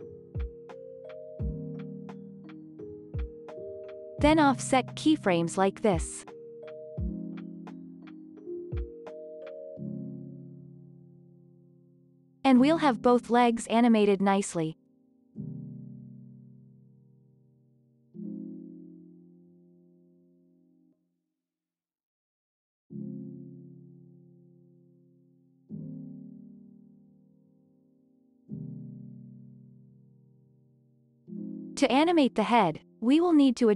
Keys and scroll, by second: 2.5 ctrl+s, 8.6 ctrl+s, 9.2 space, 28.8 space, 31.2 ctrl+a.